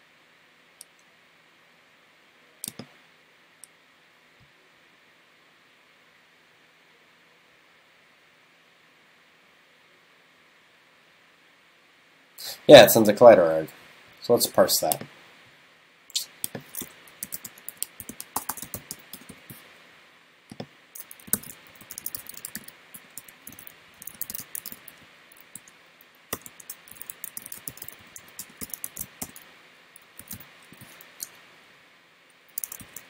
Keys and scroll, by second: 28.9 super+s.